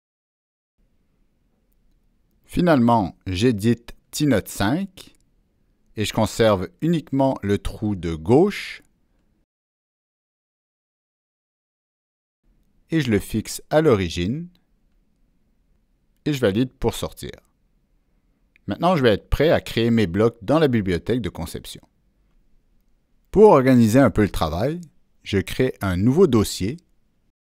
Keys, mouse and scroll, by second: 1.1 click, 3.1 click, 5.2-6.9 drag, 8.4 Delete, 10.9-13.0 drag, 13.8 click, 16.3 click.